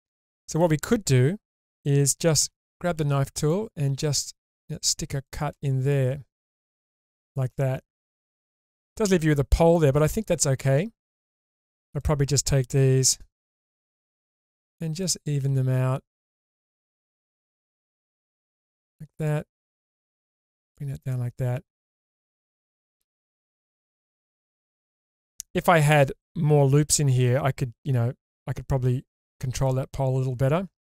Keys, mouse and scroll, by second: 2.4 k, 5.8 click, 6.4-9.0 middle drag, 9.7-11.2 middle drag, 12.0 click, 13.3 g, 13.4 g, 14.1 click, 15.0 click, 15.5 g, 15.6 g, 16.3 click, 17.1 click, 17.5 g, 17.6 g, 18.4 click, 19.1 click, 19.6 g, 19.7 g, 20.7 click, 21.1-22.7 middle drag, 23.1-25.3 middle drag, 29.3-30.9 middle drag.